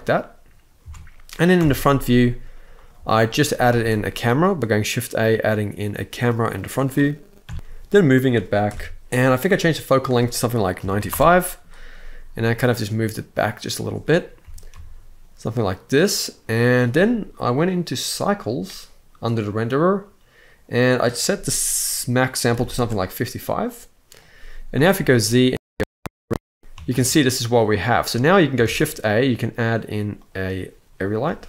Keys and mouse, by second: 0.5 Tab, 1.3 KP_1, 2.4 click, 2.6 x, 3.5 shift+a, 7.2 KP_3, 7.5 g, 8.5 KP_0, 9.0 click, 9.6-10.8 drag, 12.0 g, 13.5 click, 14.1 g, 14.4 z, 16.3 drag, 17.3 drag, 17.6-18.1 drag, 20.5-22.4 drag, 22.2 5, 24.6 z, 26.6 click, 26.6 ctrl+b, 28.3 shift+a, 30.9 g.